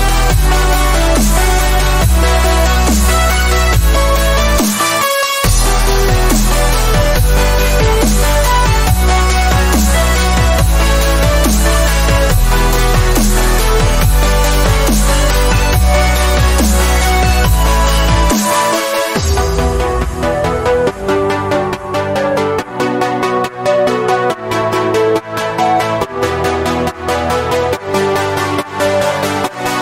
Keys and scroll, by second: 0.2 space, 1.9 space, 3.2 ctrl+z, 4.5 ctrl+alt+z, 7.0 x, 8.1 x, 11.6 ctrl+z, 12.3 x, 14.6 ctrl+z, 18.1 ctrl+z, 18.2 ctrl+z, 19.0 z, 24.7 x, 25.0 b, 25.6 ctrl+x, 29.1 x.